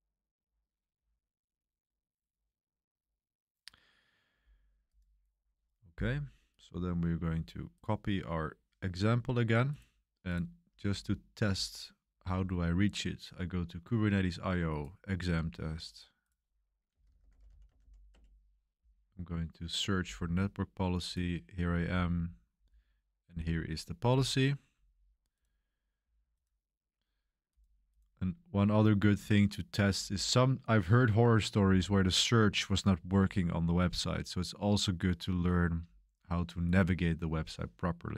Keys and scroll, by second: 16.6-18.3 typing.